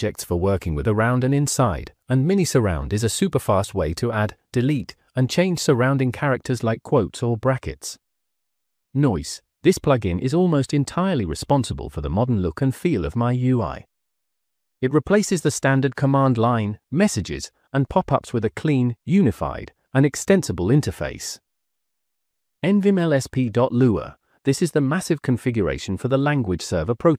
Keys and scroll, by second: 0.5-9.1 typing, 2.4 Escape, 8.2 Escape, 9.3 Return, 13.8-14.9 typing, 16.7 !, 18.5 Escape, 18.5 Return, 18.7-20.3 typing, 20.6 Escape, 22.6 -, 23.7 j, 24.3 Return.